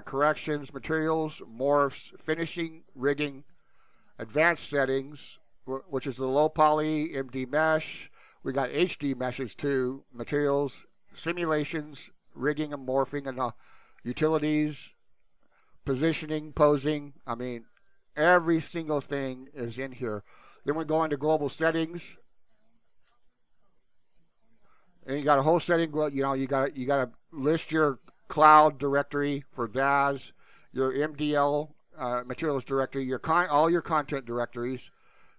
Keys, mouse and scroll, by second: 4.0 click, 13.1 click, 14.0 click, 15.7 click, 16.9 click, 17.9 click, 18.5 click, 23.3-35.3 drag.